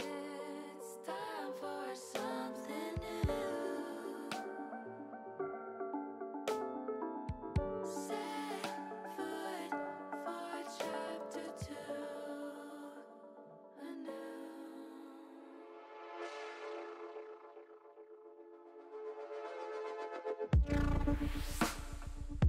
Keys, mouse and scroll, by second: 0.7 e, 2.4 s, 5.1 click, 5.6 middle click, 9.4 click, 10.2 shift+click, 11.2 shift+click, 12.3 ctrl+z, 12.7 click, 13.1 click, 13.7 click, 14.2 middle click, 15.1 click, 15.5 shift+click, 16.0 shift+click, 16.7 shift+click, 17.1 shift+click, 18.2 middle click, 18.9 shift+middle click, 21.3 e.